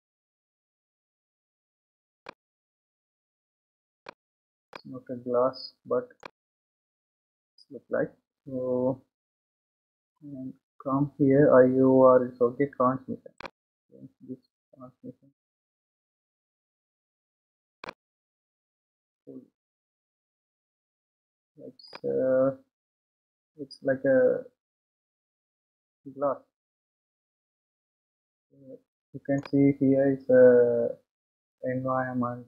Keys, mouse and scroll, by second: 0.5-1.5 scroll up 2, 1.5-1.8 scroll down 2, 2.4-6.9 middle drag, 6.9 scroll up 1, 13.8-16.6 drag, 18.1-22.1 drag, 22.1-25.3 middle drag, 30.5-30.9 scroll up 1.